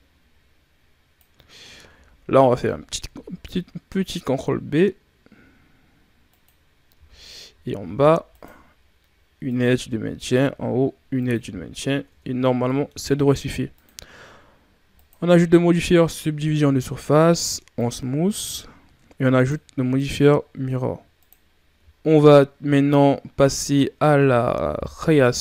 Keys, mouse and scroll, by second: 2.4 ctrl+b, 6.9 z, 7.8 ctrl+r, 9.9 ctrl+r, 11.3 z, 11.8 scroll down 4, 12.3-13.6 middle drag, 15.0-16.2 drag, 16.2 w, 19.2-19.8 drag, 21.2-21.6 drag, 21.6-22.1 scroll up 6, 23.1-24.8 scroll down 9, 24.8 KP_3.